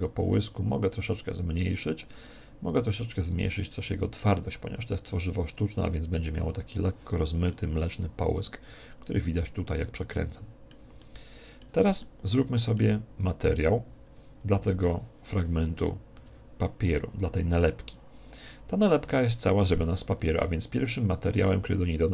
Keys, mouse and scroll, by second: 1.1 click, 3.0 click, 7.4-9.1 middle drag, 10.9-14.2 middle drag, 13.1 right click, 14.6 z, 20.7-22.1 drag.